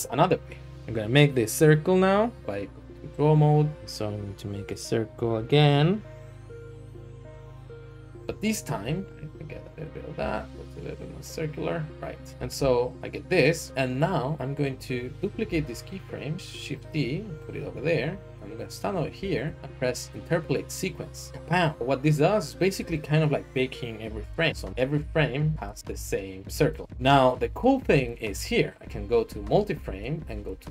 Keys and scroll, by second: 2.3-3.7 Tab, 8.8 Tab, 12.3 Tab, 13.6 alt+shift+z, 15.4 d, 19.1 a, 19.4 a, 26.4 g, 26.8 ctrl+z.